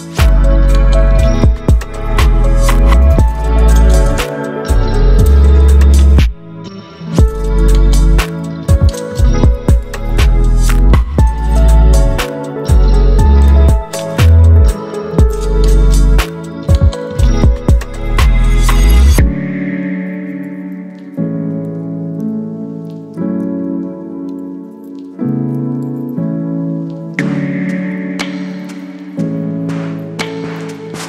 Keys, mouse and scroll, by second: 0.3 shift+click, 1.7 ctrl+t, 3.4-4.6 drag, 6.1 shift+click, 7.5-11.9 drag, 19.1 b, 20.3 right click, 20.9 click, 21.5 right click, 23.6 Return, 24.7 click.